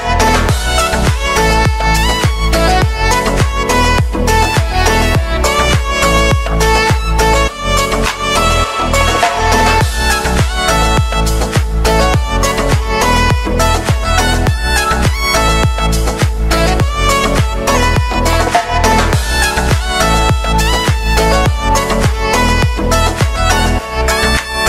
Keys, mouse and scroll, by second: 1.6 space, 2.2-4.4 drag, 4.9 u, 5.5 click, 6.2 space, 8.9 click, 11.0 ctrl+d, 11.7-15.5 drag, 15.5 space, 18.6 click, 18.9 ctrl+a, 19.9 ctrl+d, 20.8-24.6 drag.